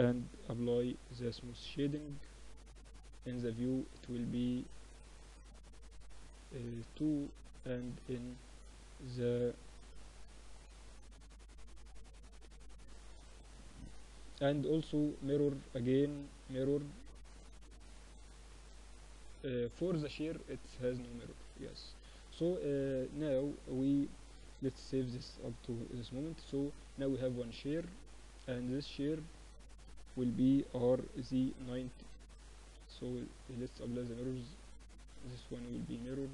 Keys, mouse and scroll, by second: 0.3 click, 0.4 t, 1.1-2.9 middle drag, 2.9-7.3 drag, 7.3 middle click, 7.5-8.7 drag, 8.7-9.9 middle drag, 9.3 Tab, 9.9 ctrl+r, 11.1 Tab, 11.9-13.4 drag, 12.3-14.3 z, 13.4-16.3 middle drag, 20.7-24.9 middle drag, 21.7 a, 22.0 a, 23.7 ctrl+s, 24.9 KP_7, 25.2-28.1 middle drag, 25.8 z, 26.7 a, 26.9 a, 29.6 r, 31.7 z, 33.9-36.3 middle drag.